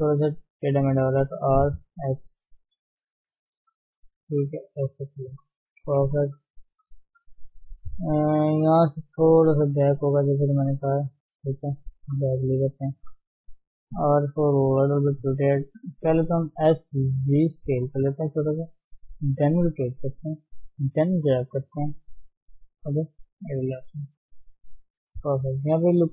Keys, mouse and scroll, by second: 1.4 r, 5.8 KP_1, 6.2 KP_3, 7.6 shift+z, 8.7 g, 10.7 shift+z, 11.4-11.8 scroll down 2, 12.2 KP_1, 13.0 scroll up 2, 13.3 shift+z, 14.2 r, 16.2 ctrl+z, 16.6 s, 20.1 g, 21.3-21.7 scroll up 1, 21.7 shift+middle click, 22.4 g, 24.2 r.